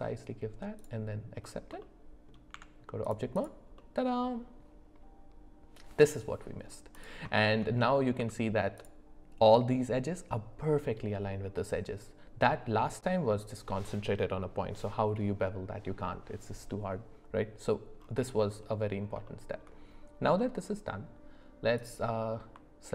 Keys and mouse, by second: 1.8 middle click, 2.5 Tab, 3.4 click, 3.8-6.7 middle drag, 7.4 shift+middle drag, 8.2 Tab, 19.2 shift+middle click, 20.3 middle click, 21.7 click.